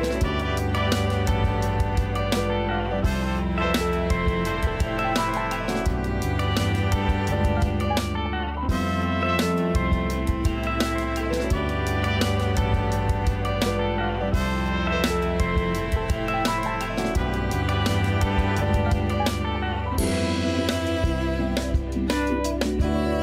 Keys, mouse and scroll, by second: 0.4 KP_1, 0.8 scroll up 4, 1.3-1.8 shift+middle drag, 2.2 g, 3.7-4.3 scroll down 5, 4.3 a, 4.5 a, 5.0-8.5 shift+middle drag, 8.5-9.0 scroll up 2, 9.0 click, 10.2 Tab, 11.7 l, 13.5 shift+d, 14.8 s, 16.5-17.3 scroll down 3, 17.3 KP_1, 18.1-18.6 scroll up 1, 18.6-19.0 scroll down 2, 19.0 s, 22.1 a, 22.3 a, 22.8 ctrl+r.